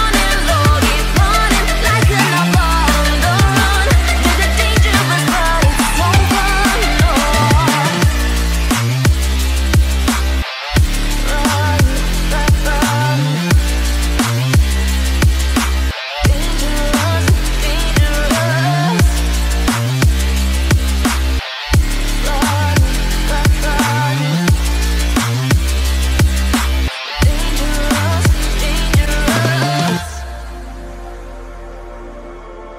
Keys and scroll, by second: 12.3 ctrl+alt+z, 32.4 ctrl+0.